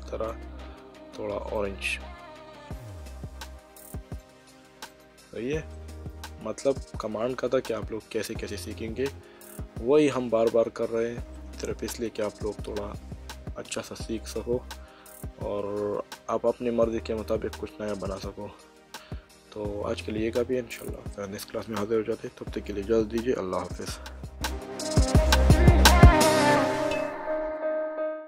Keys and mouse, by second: 1.5 click, 4.9 click, 5.7 middle click, 11.3 middle click.